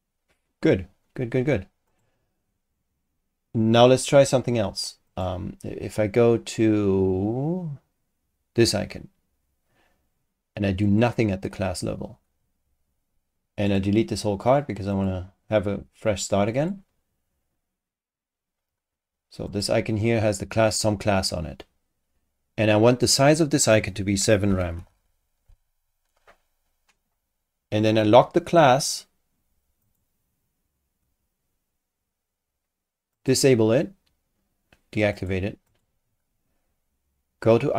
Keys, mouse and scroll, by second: 0.2-0.5 scroll up 2, 1.9 click, 5.1 click, 10.8 click, 13.7 click, 14.9 click, 16.5 click, 19.5 click, 22.9 click, 24.2-25.4 typing, 29.8 click, 33.1 click, 35.1 click, 35.7 click.